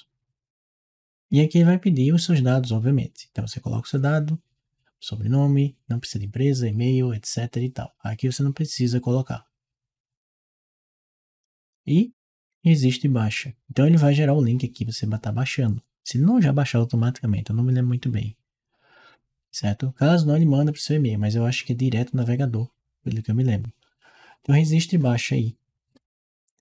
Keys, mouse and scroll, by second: 26.5 click.